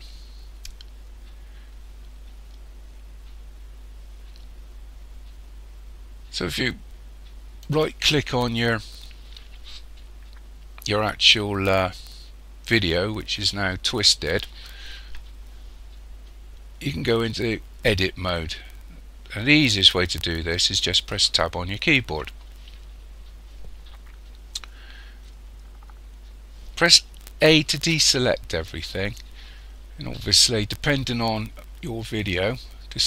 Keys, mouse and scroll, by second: 0.0-0.5 scroll down 2, 2.9 scroll up 1, 7.7 right click, 21.2 Tab, 27.8 a.